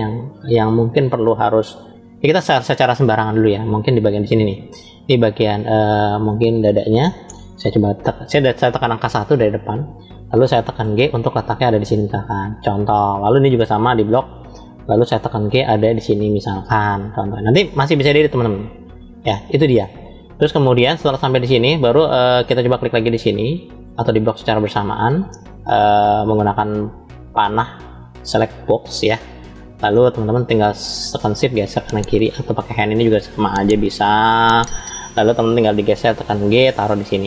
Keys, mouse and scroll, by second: 0.0 scroll up 1, 3.7-5.7 drag, 8.7 KP_1, 10.6 g, 13.2 click, 15.2 g, 21.0 shift+middle click, 22.6 click, 24.0 click, 29.8-32.3 shift+middle drag, 33.0-34.5 drag.